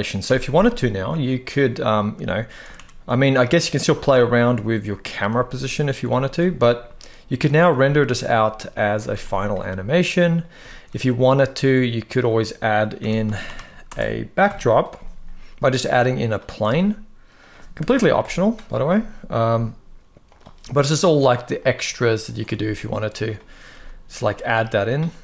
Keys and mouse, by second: 1.1 click, 2.4 r, 2.5 r, 3.6 r, 4.1 click, 5.0 g, 5.5 click, 5.8 z, 7.5 z, 8.8 ctrl+s, 9.0 ctrl+s, 10.4 shift+a, 12.7-14.1 typing, 13.5 Return, 15.1 g, 15.8-16.3 drag, 17.0 click, 17.0 r, 17.5 Right, 17.9 KP_0, 19.2 g, 20.9 click, 21.3-22.0 drag, 22.6 s, 23.4 g, 25.1 g.